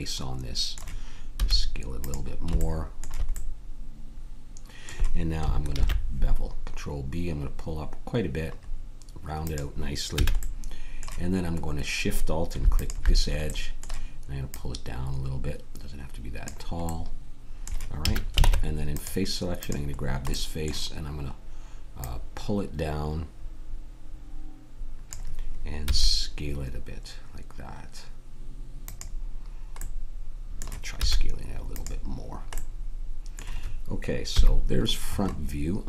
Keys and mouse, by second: 1.3 s, 5.7 ctrl+b, 10.2 a, 18.0 a, 18.4 ctrl+Tab, 22.0-25.1 drag, 25.9 s, 30.9 s, 31.7-32.7 drag, 34.3 KP_1, 35.3-35.8 middle drag.